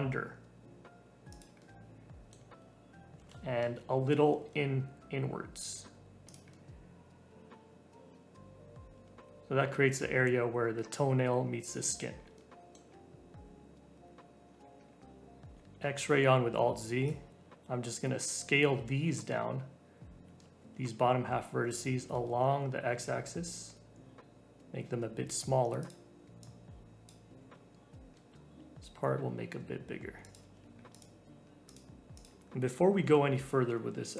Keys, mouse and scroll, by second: 1.5-3.1 middle drag, 3.1 g, 6.5-9.1 middle drag, 9.1 scroll up 2, 11.6 middle click, 12.1 Tab, 12.3 middle click, 13.0-14.4 scroll up 1, 14.8-15.8 scroll up 1, 15.8 alt+z, 17.0 click, 20.2 s, 26.4 click, 27.3 s, 30.4 Tab, 30.7 scroll down 1, 30.9 click, 31.6 click, 32.0 scroll down 3, 32.1 click, 32.5 scroll up 2, 33.0 Tab.